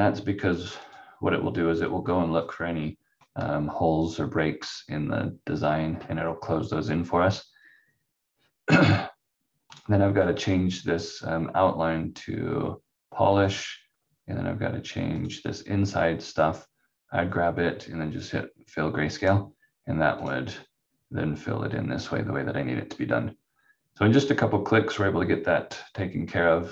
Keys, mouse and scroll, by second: 0.8 click, 9.7 click, 13.4 click, 19.1 click.